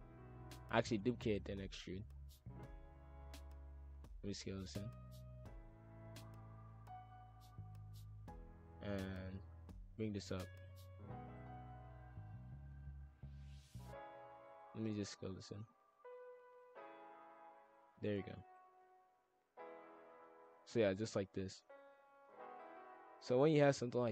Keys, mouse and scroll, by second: 0.1 s, 1.1 e, 2.0 click, 3.4 ctrl+z, 3.8 s, 6.3 click, 8.5 click, 8.9 shift+f, 10.6 shift+click, 11.3 e, 12.0 click, 14.2 ctrl+;, 14.7 ctrl+l, 15.6 s, 15.6 x, 16.0 s, 18.2 shift+f, 22.1 click, 22.5-24.1 drag.